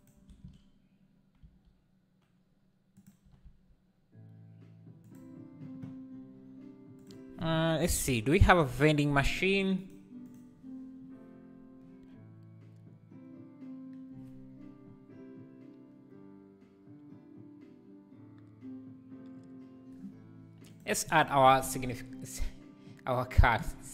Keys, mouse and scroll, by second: 0.0-0.3 shift+right drag, 0.3 shift+s, 1.5 s, 3.3 r, 8.8-23.8 drag.